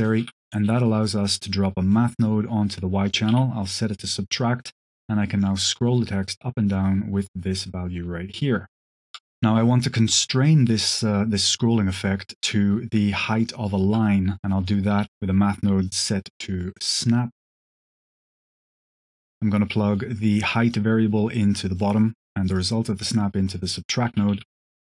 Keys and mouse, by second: 0.1 q, 2.1-2.7 drag, 3.0 click, 4.3-9.1 drag, 10.0-13.7 shift+drag, 14.6 shift+a, 15.2 q, 16.1 click, 17.2-18.2 drag, 18.5 click, 20.0-21.3 drag, 21.6 click, 22.4-23.1 drag, 23.7 click, 24.0 h, 24.2 g.